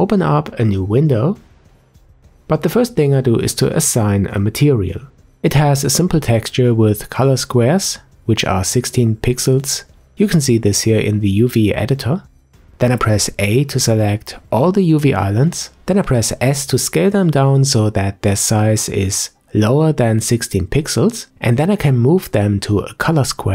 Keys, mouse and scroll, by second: 11.0-13.7 drag, 13.7-14.4 scroll down 1, 14.4 a, 16.0 s, 18.7 shift+middle click, 19.2-20.7 scroll up 1, 20.7 g, 23.4 s.